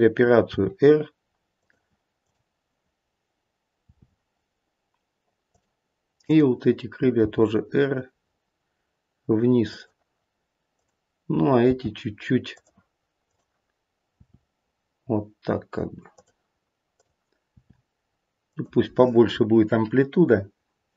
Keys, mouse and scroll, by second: 0.5 r, 2.1 click, 3.9 r, 6.3 click, 7.2 r, 10.7 click, 11.6 r, 13.3 click, 14.2 click, 14.2 r, 16.9 click, 17.5 r.